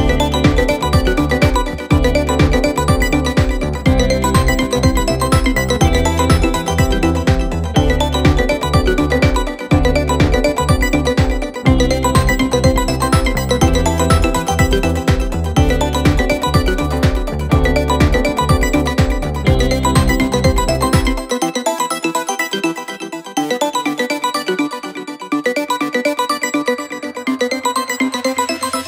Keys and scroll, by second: 2.4 F9, 4.8 3, 12.5 ctrl+d, 12.6 Escape, 14.6 ], 22.8 ], 27.1 4, 27.8 3.